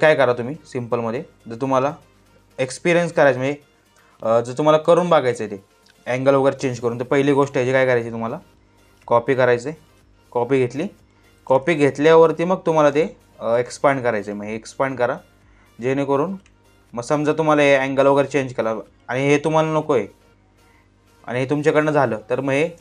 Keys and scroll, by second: 10.5 space, 12.6 space, 21.7 space.